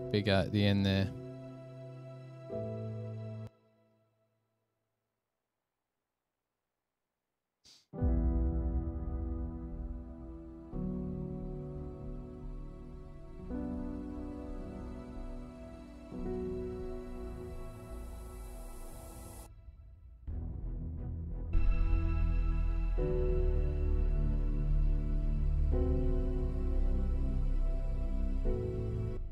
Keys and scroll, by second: 1.8 F7, 3.9 Return, 4.0 Return, 4.7 super+s, 5.5 super+[, 5.6 super+[, 8.5 alt+a, 9.8 super+=, 23.3 super+=.